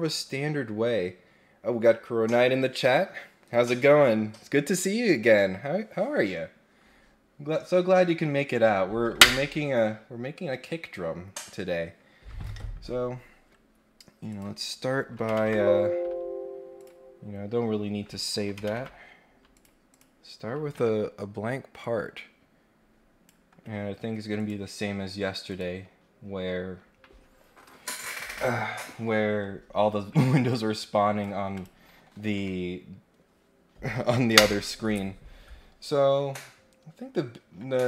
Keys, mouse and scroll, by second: 14.2 click, 16.7 click, 19.5 click, 19.9 click, 21.8-23.2 drag, 24.3 click, 25.5 click, 30.5 click, 31.5 click.